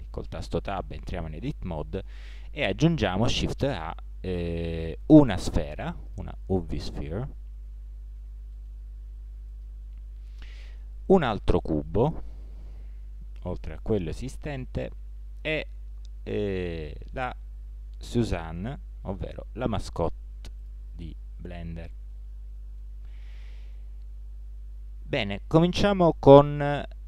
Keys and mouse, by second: 0.3 Tab, 3.3 shift+a, 8.2 g, 10.7 shift+a, 13.2 g, 14.8 shift+a, 18.6 g, 21.2-26.3 middle drag.